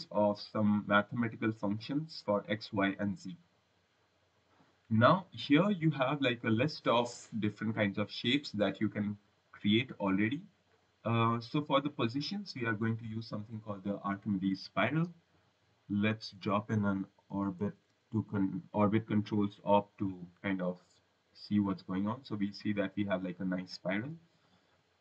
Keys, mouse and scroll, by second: 0.0-0.9 scroll, 5.0-5.9 scroll, 6.0 click, 8.7 click, 10.6 click, 15.1 right click, 16.0 click, 19.8 click, 20.6 click, 24.6 scroll, 24.9 right click.